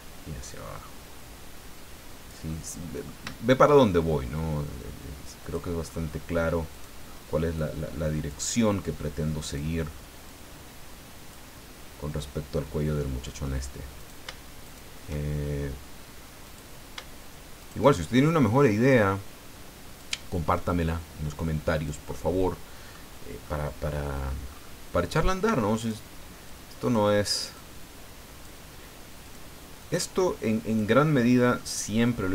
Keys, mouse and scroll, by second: 2.5-3.8 middle drag, 5.4 click, 5.9-6.3 scroll up 1, 6.7 right click, 7.0 middle click, 7.6 click, 9.4 right click, 10.3-11.5 drag, 12.2-13.6 middle drag, 14.0 shift+right click, 14.6 shift+right click, 16.4 click, 17.6 shift+right click, 18.6-20.2 drag, 20.7-22.0 drag, 22.1 middle click, 22.5 scroll up 1, 22.7 middle click, 23.1-23.4 scroll down 1, 23.4 middle click, 24.5-24.8 scroll up 1, 25.8 right click, 26.4 click, 27.5 click, 29.2 right click, 29.8 click, 31.6-32.3 middle drag.